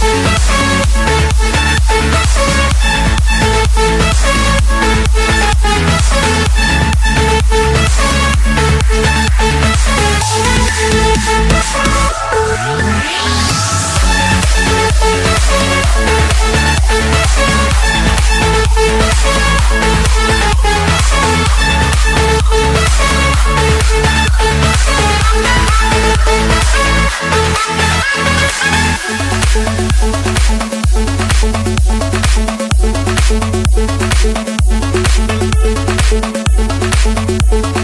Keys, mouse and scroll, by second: 0.0 click, 1.2 click, 2.4-3.6 scroll, 4.0-6.1 typing, 5.2 Return, 7.6 click, 7.6 click, 7.7 click, 8.4 middle click, 9.1 middle click, 9.8 middle click, 10.0 middle click, 10.4 middle click, 10.5 middle click, 10.6 middle click, 11.8-12.9 typing, 14.1 Return, 15.8-16.9 drag, 19.6-20.9 typing, 21.1 Return, 22.1 click, 22.4 click, 23.5-23.9 typing, 24.2 Return, 25.6 click, 26.3 click, 27.2 click, 27.4 click, 28.1 typing, 28.3 Return, 30.6 click, 32.0 click, 32.5-33.0 scroll, 34.0 click, 34.1 click, 34.9-36.0 typing, 36.4 Return.